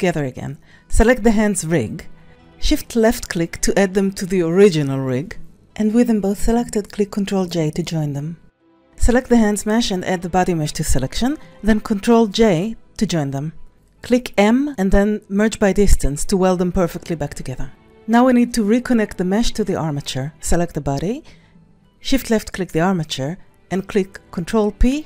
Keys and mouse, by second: 0.1 click, 1.2 s, 2.1 click, 9.1 ctrl+click, 9.6 ctrl+s, 10.0 click, 11.0 ctrl+c, 12.6 ctrl+Tab, 13.2 a, 14.4 q, 16.5 Tab, 17.6 click, 18.6 click, 19.0 s, 19.2 click, 20.9 click, 21.3 s, 21.7 click, 22.6 c.